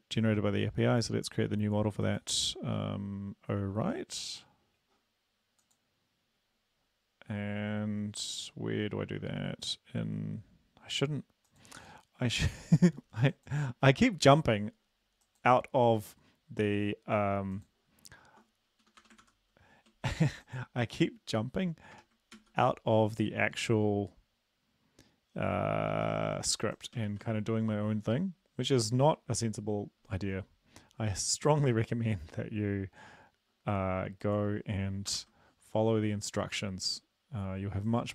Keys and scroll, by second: 13.7 ctrl+`, 18.8 Return, 19.0 Return, 19.2 ctrl+v, 22.0 BackSpace, 22.4 ctrl+s, 27.1 ctrl+`, 35.1 ctrl+l.